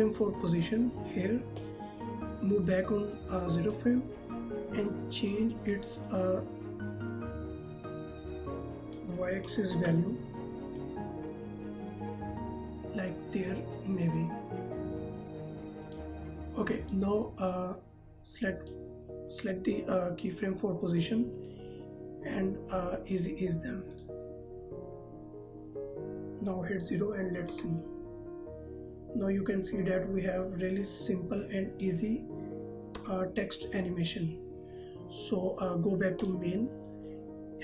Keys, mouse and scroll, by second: 1.8 click, 9.9 z, 10.9 click, 21.5 right click, 24.1 click, 27.8 KP_0, 31.3 click, 33.2 KP_0, 36.5 click.